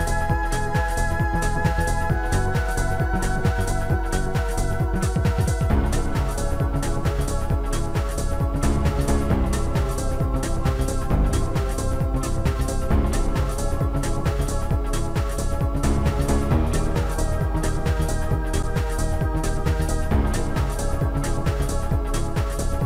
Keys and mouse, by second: 1.9 click, 3.8 right click, 5.7 click, 5.7 right click, 9.3 shift+click, 11.5 shift+click, 14.1 shift+click, 15.0 Delete, 16.2 right click, 17.1 click, 17.7 click, 20.1 click, 21.5 click.